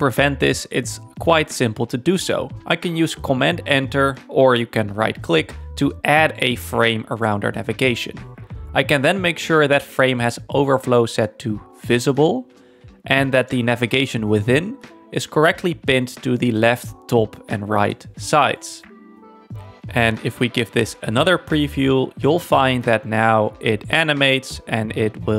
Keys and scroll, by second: 2.6 super+Return.